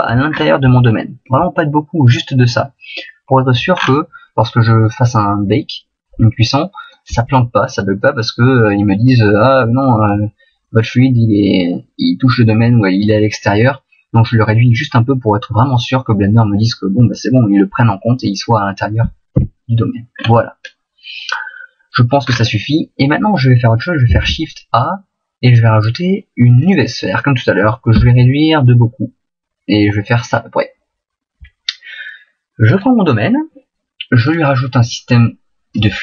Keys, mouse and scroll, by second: 0.3-0.8 scroll up 3, 0.8 shift+middle click, 3.7 scroll down 4, 6.5 shift+middle click, 7.9 middle click, 10.6 middle click, 19.3 KP_1, 20.1-21.1 scroll up 2, 21.1-22.2 scroll up 1, 22.2-22.7 scroll down 4, 24.1 shift+a, 27.9 s, 30.3 click, 32.7 right click, 34.2 click.